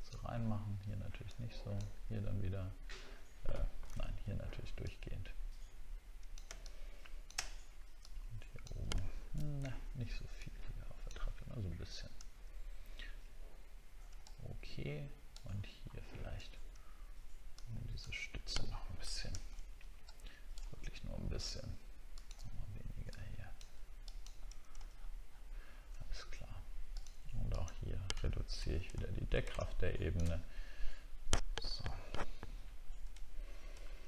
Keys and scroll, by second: 3.9 ctrl+z, 9.6 ctrl+z, 16.1 alt+scroll up 1, 19.0 ctrl+z, 19.5 alt+scroll up 1, 24.9 alt+scroll down 1, 25.7 alt+scroll down 1, 28.5 ctrl+d, 29.0 alt+scroll down 2, 33.8 alt+scroll up 1.